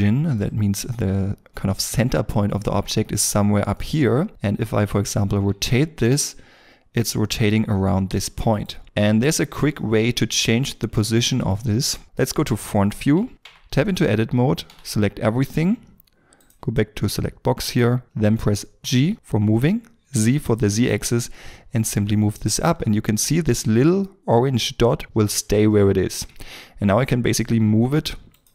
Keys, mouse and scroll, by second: 5.4 r, 5.4 r, 8.5 right click, 12.0 middle click, 13.3 shift+middle click, 13.4 Tab, 14.6 a, 18.8 g, 20.1 z.